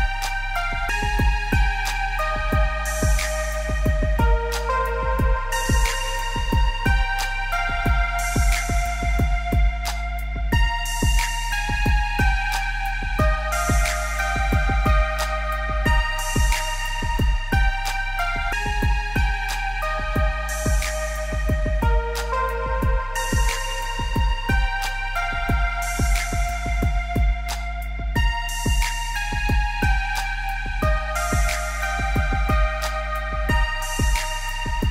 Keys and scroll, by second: 18.6 ctrl+z.